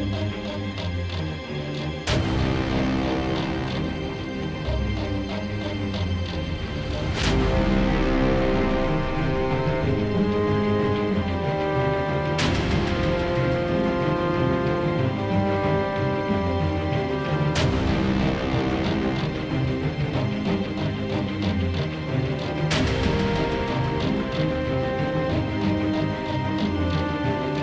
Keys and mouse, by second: 9.7-15.3 middle drag, 24.9-26.9 middle drag, 27.3 ctrl+b.